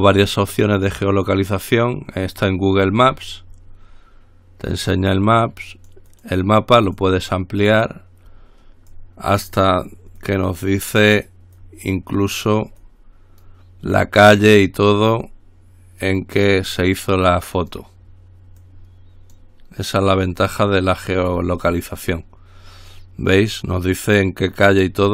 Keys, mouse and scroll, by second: 1.6 click, 3.2-3.8 scroll up 2, 6.0-7.0 drag, 7.0 click, 7.9 click, 9.1-10.3 drag, 10.4-11.7 drag, 11.8-13.0 drag, 13.1-14.2 drag, 16.2 click, 17.1-18.4 drag, 18.8-20.0 drag, 20.3-21.3 drag, 21.4-22.9 drag, 23.1-24.1 drag.